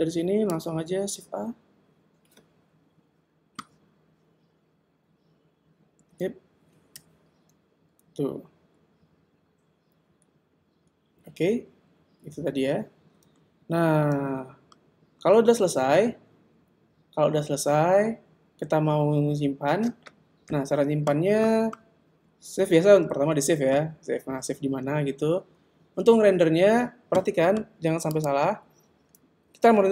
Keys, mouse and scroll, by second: 1.3 alt+a, 7.1 KP_0, 10.8 Escape, 22.9 super+s, 28.1 click.